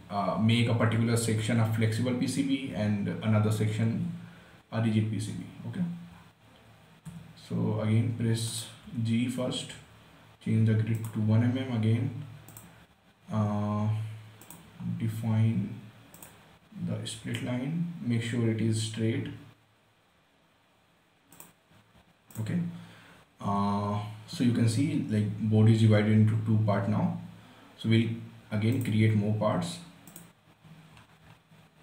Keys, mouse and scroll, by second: 6.1 scroll up 1, 7.4 g, 8.4 scroll down 1, 8.8 right click, 9.1 g, 11.3 click, 21.7 click, 24.9-26.7 scroll down 1, 29.1 click, 31.3 scroll up 1.